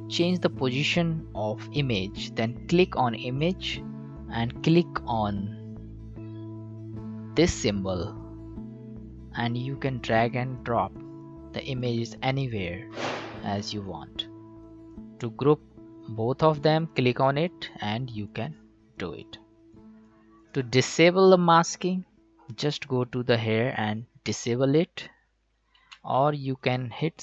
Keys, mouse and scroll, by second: 3.5 click, 3.9 ctrl+z, 8.1 click, 16.8-22.1 drag, 22.5 click, 25.8 ctrl+z.